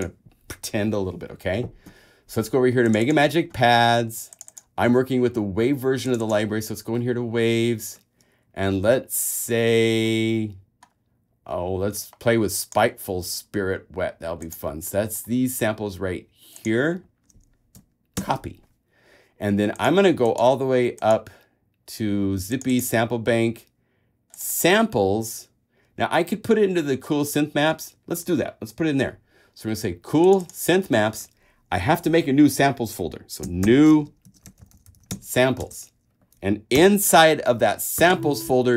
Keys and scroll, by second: 18.4 shift+super+c, 33.8 shift+super+n, 34.4-35.8 typing, 36.8 super+Return, 37.1 super+o, 38.3 super+v.